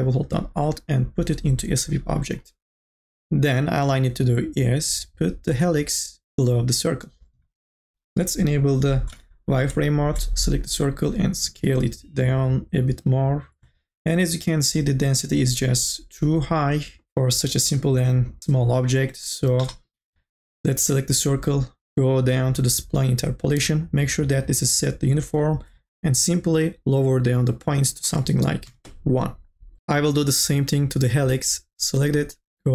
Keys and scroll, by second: 9.4 n, 9.4 b, 28.8 Return.